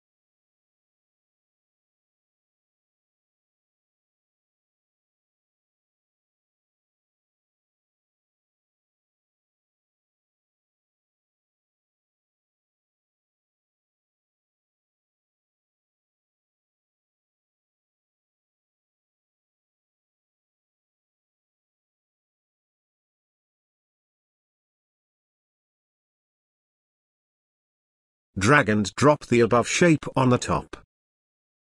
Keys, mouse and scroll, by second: 1.8-4.5 drag, 20.1 click, 22.8 click, 25.1-31.7 drag.